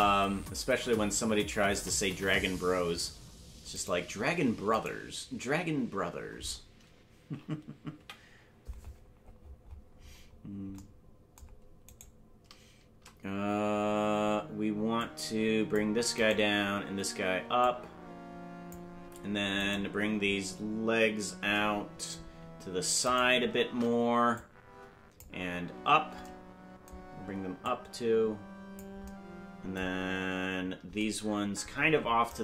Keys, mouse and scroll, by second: 3.9 right click, 4.9 right click, 7.9 KP_7, 9.4-10.1 scroll down 13, 12.1 right click, 15.0 click, 16.3 right click, 17.5-18.7 drag, 19.7 right click, 20.5-20.9 scroll down 4, 23.3 shift+right click, 24.3 click, 27.6-28.8 drag.